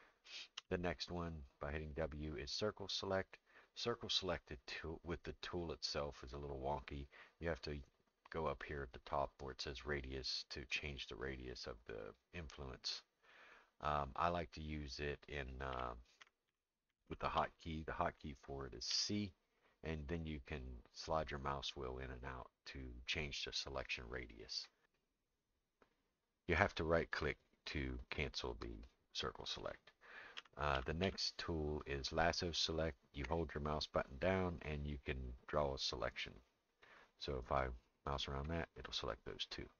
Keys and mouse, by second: 0.6 w, 9.9 click, 15.7-17.4 typing, 18.9 c, 30.4 w, 30.7 w, 33.4-36.1 drag, 33.4 w, 36.8-38.5 drag.